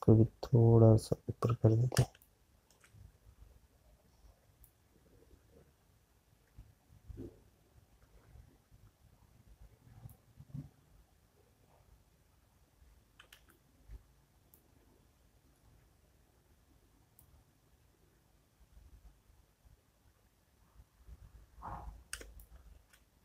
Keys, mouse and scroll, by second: 0.3 space, 1.2 alt+click, 5.0 space, 6.8 click, 10.9 click.